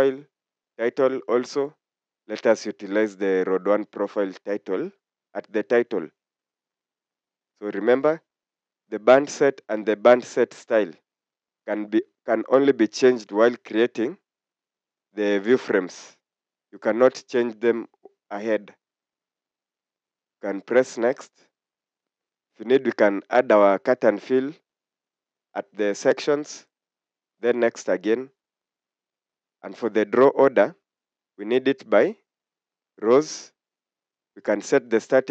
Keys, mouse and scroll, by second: 4.2 click, 20.2 click, 27.4 click.